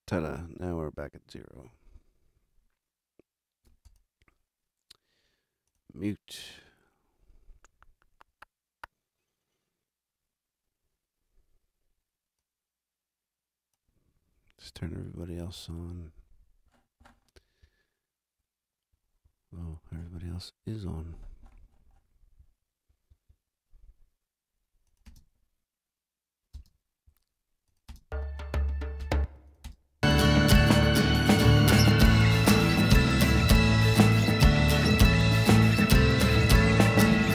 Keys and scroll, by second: 14.6 super+=, 25.0 space, 26.5 space, 27.9 space, 33.5 super+=.